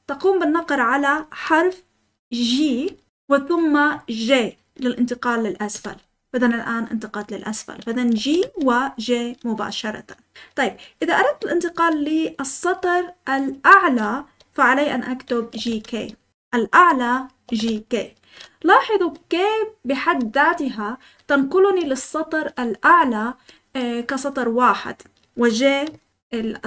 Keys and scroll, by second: 3.1 g, 5.7 j, 7.9-8.9 typing, 15.3-16.1 typing, 17.2-18.0 typing, 21.0-24.1 typing, 25.8-26.6 typing.